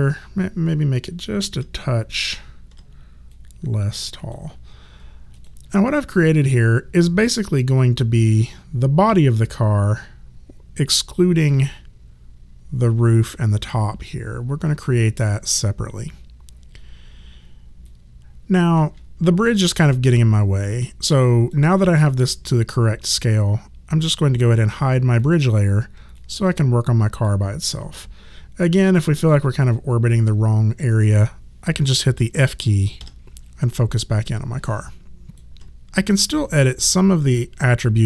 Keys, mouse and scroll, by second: 1.5 r, 2.3 click, 2.7 r, 3.3 click, 5.4 click, 17.9 click, 19.8 alt+click, 25.2 click, 26.2 alt+click, 29.0 alt+middle click, 29.4 alt+click, 33.9 alt+click.